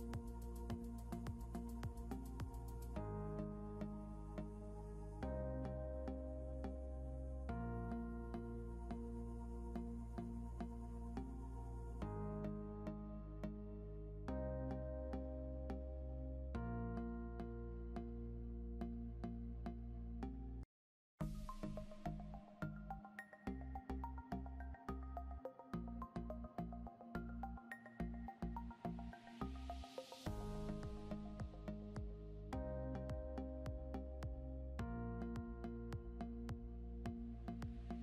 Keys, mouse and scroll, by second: 0.5 click, 2.1-3.1 typing, 3.8 ctrl+g, 4.9 Up, 6.8 click, 7.6 Up, 9.9 click, 10.6 c, 12.1 ctrl+z, 12.8 click, 15.1 ctrl+g, 15.8 shift+click, 16.4 c, 17.1 scroll down 1, 17.8 click, 18.2 scroll up 1, 19.9 click, 21.7 Up, 24.5 click, 25.1 scroll down 1, 25.8 click, 29.9 click, 37.0 right click.